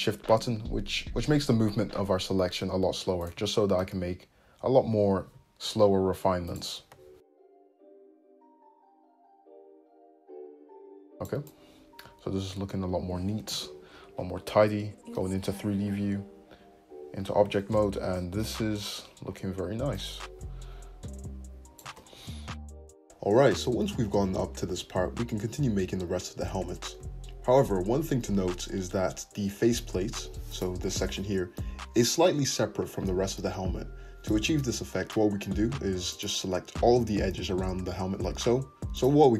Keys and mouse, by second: 1.8-7.0 middle drag, 2.2 `, 7.0 click, 7.1-11.3 shift+middle drag, 8.7 g, 11.3 click, 11.4 middle click, 11.6 click, 12.0-15.7 shift+middle drag, 15.3 Tab, 15.7-23.1 drag, 18.6 `, 19.6 Tab, 22.2 `, 22.9 Tab, 23.1-30.5 middle drag, 23.1 n, 23.1 `, 25.4 `, 30.0 Tab, 30.5 click, 30.6-35.5 middle drag, 30.8 l, 36.1 click, 38.8 ctrl+z, 38.9 click.